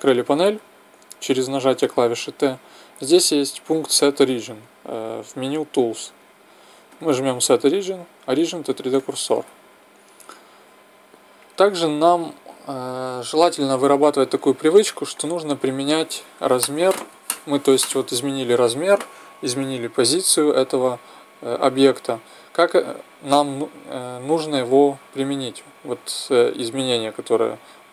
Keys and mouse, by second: 1.1 t, 1.6 t, 6.9-9.0 drag, 14.3-18.1 middle drag.